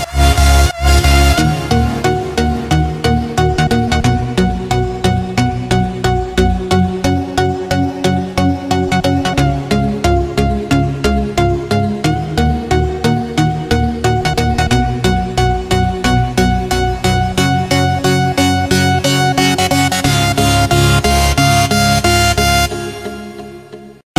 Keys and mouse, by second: 0.0 click, 1.6-5.3 middle drag, 8.0 r, 12.1 r, 15.2-17.3 middle drag, 18.5 click, 21.4 click, 22.0 click.